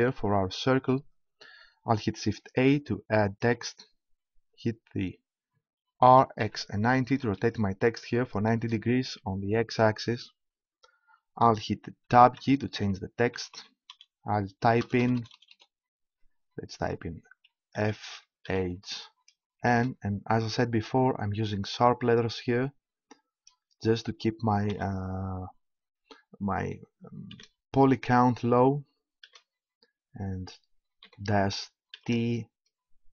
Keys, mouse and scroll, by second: 2.6 shift+a, 6.1 r, 12.4 Tab, 13.3 =, 14.8 BackSpace, 15.0 BackSpace, 15.5 BackSpace, 17.8 shift+f, 18.5 shift+h, 19.6 shift+n, 21.9 -, 24.7 4, 27.3 shift+t, 29.2 shift+h, 31.0 -, 32.0 shift+t.